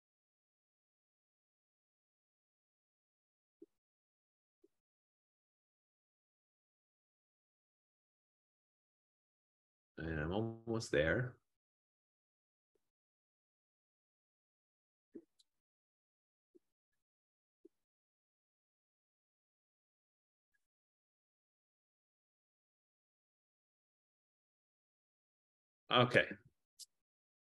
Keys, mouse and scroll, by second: 7.1-13.5 drag, 18.2-23.3 drag, 26.3 Return.